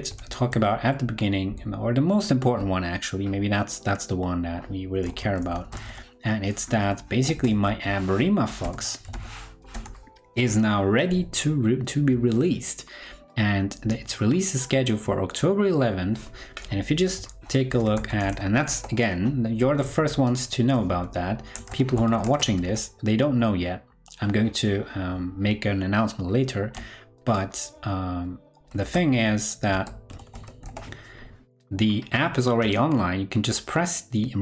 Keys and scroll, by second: 0.2 super+t, 17.6 super+t.